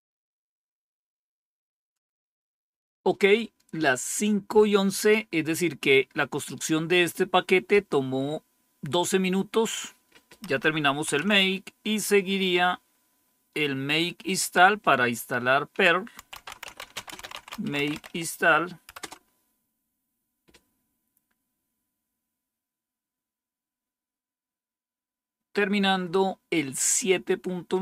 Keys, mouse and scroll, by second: 9.5 click, 10.6 Up, 11.0 Down, 12.3-13.8 scroll down 1, 14.2 click, 14.5 typing, 15.9-18.9 typing.